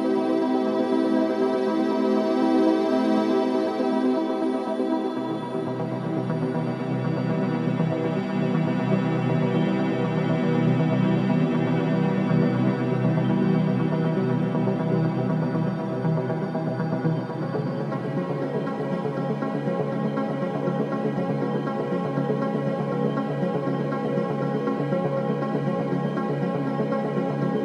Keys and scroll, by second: 0.2 3, 3.7 Delete, 4.9 Delete, 5.6 ], 14.0 Delete, 14.4 Delete, 17.1 ], 23.4 Escape.